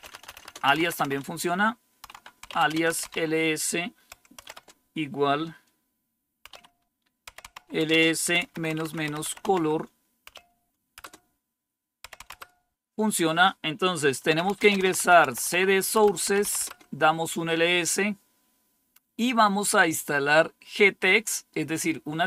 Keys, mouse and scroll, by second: 0.0-4.3 typing, 6.4-12.5 typing, 14.2 Return, 14.5-17.2 typing.